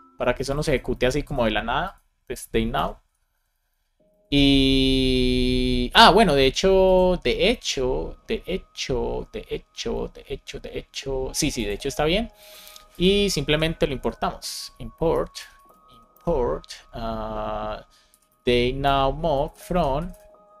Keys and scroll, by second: 0.9 super+c, 2.4-3.3 typing, 4.0 Down, 4.6 Up, 13.4 Return, 15.0 BackSpace, 16.1 space, 18.8 Return, 19.3 space, 20.0 space.